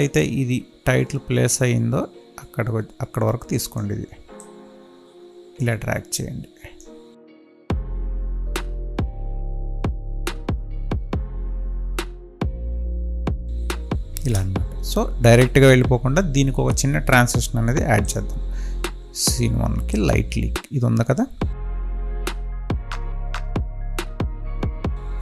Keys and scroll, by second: 9.3 space, 14.3 space.